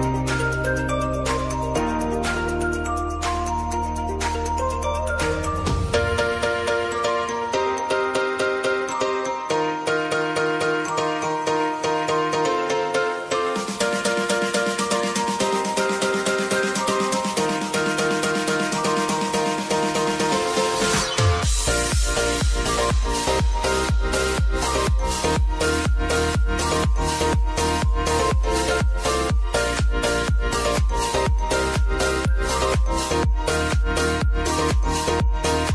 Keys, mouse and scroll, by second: 0.2 click, 0.5 space, 1.6 click, 2.2 space, 3.4 click, 3.7 space, 5.1 click, 5.4 space, 6.5 click, 6.9 space, 8.6 click, 10.8 ctrl+alt+Home, 12.5 click, 13.8 v, 14.3-20.4 drag, 20.4 click, 22.4 s, 23.1-26.4 drag, 27.5 `, 28.9-30.6 drag, 35.2-35.7 drag.